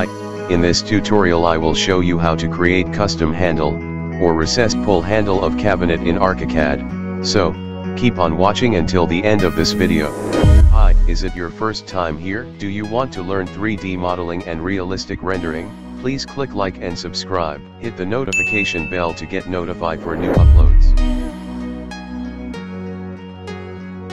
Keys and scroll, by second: 0.0-5.6 typing, 8.1 Escape.